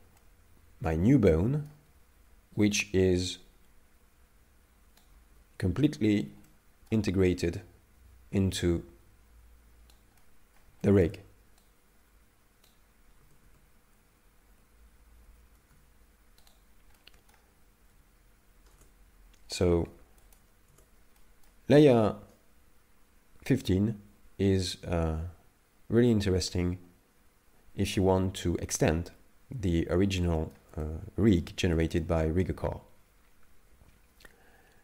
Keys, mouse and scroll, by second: 0.2 middle click, 2.6 right click, 2.7 right click, 5.0 right click, 5.3 ctrl+z, 6.1 ctrl+z, 6.5 middle click, 7.5 right click, 10.2 middle click, 10.8 shift+middle click, 11.6 right click, 13.2 a, 13.5 a, 14.5 alt+g, 15.3 alt+r, 15.6 alt+s, 16.5 right click, 17.0 middle click, 17.9 x, 18.7 Tab, 19.9 x, 20.7 Tab, 21.2 middle click, 30.2 shift+middle click, 30.8 middle click, 31.7 shift+middle click.